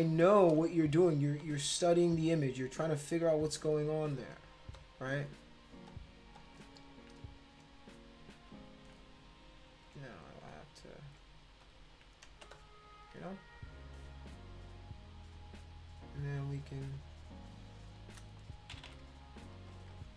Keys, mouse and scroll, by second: 0.3 click, 1.4 shift+click, 2.9 click, 3.3 shift+click, 4.1 click, 4.7 shift+click, 5.9 click, 6.3 click, 6.8 shift+click, 7.4 click, 8.4 shift+click, 9.7 click, 10.1 shift+click, 10.9 click, 11.6 shift+click, 12.4 space, 12.5 click, 13.6 click, 13.7 click, 16.2-18.0 drag, 18.7 ], 18.9 ], 19.6 click, 19.9 click.